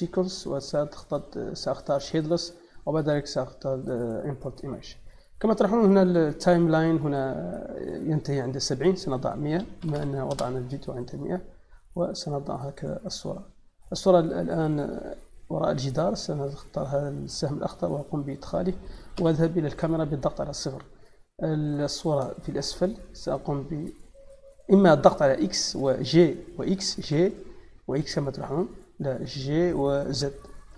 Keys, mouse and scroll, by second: 1.8 click, 4.2 click, 8.6 click, 10.2 Return, 12.0-12.4 drag, 13.5 click, 13.9 middle click, 15.7 middle click, 17.0 click, 18.2 middle click, 20.3 middle click, 20.7 a, 21.8 click, 22.6 click, 23.9-26.1 drag, 26.9 g, 27.8 x, 29.1 click, 30.6 z.